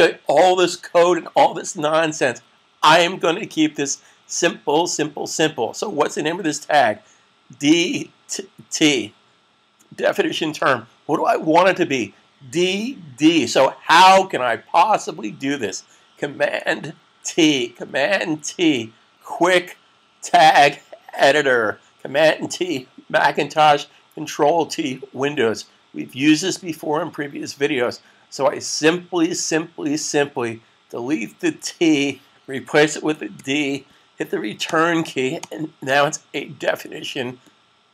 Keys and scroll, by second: 18.3 t, 33.1 d.